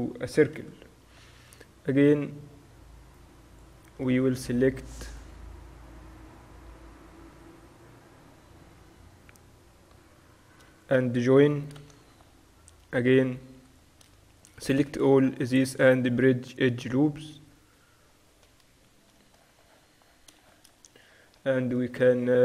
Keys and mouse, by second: 0.6 KP_Divide, 1.5 Tab, 3.0-4.9 drag, 4.2 Tab, 5.0-9.8 middle drag, 7.4 Tab, 10.9-13.4 drag, 11.8 ctrl+j, 12.0 Tab, 13.5 a, 13.8-16.5 drag, 15.2 w, 17.4 a, 17.7 right click, 18.7 KP_7, 19.4 click, 19.5 middle click.